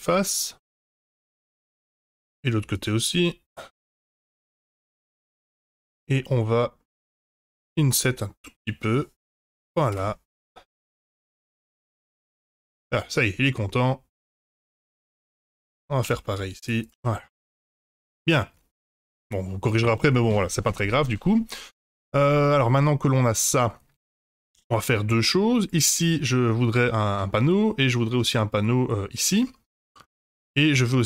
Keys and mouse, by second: 0.0 shift+click, 0.3 shift+click, 0.7 shift+click, 1.1 shift+click, 1.9 middle click, 3.0 shift+click, 6.1 middle click, 7.5 i, 9.9 Return, 11.8 Tab, 12.2 Tab, 12.6 Tab, 12.8-14.2 middle drag, 14.3 Tab, 14.9 click, 15.2 shift+click, 16.0 i, 16.9 Tab, 17.4-19.0 middle drag, 19.6 middle drag, 21.3-22.1 middle drag, 22.8-25.2 middle drag, 27.6 middle drag, 29.1-29.8 middle drag.